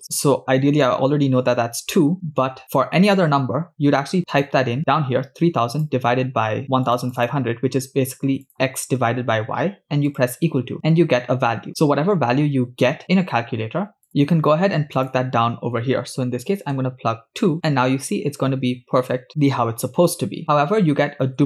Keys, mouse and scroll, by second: 1.1 scroll down 2, 14.2 middle click, 14.2-14.6 scroll up 5, 14.9-16.8 drag, 21.1 scroll down 2.